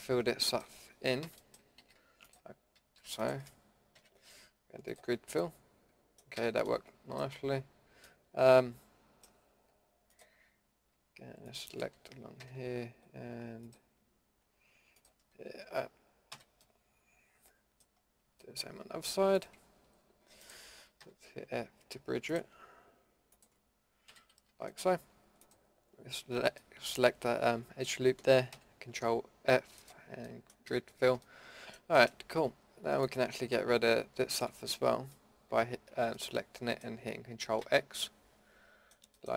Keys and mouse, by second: 1.2 f, 1.4 middle click, 1.8 a, 2.8 a, 4.0 ctrl+f, 5.4-6.3 middle drag, 6.3 a, 6.9-8.1 middle drag, 12.4 f, 16.3 f, 17.4 middle drag, 17.6 middle click, 18.4 middle click, 19.3-19.6 middle drag, 21.0 f, 24.1 f, 24.5 a, 24.8-26.7 middle drag, 28.5 ctrl+f, 30.7 a, 33.0-33.5 middle drag, 36.2 middle drag, 37.6 ctrl+x.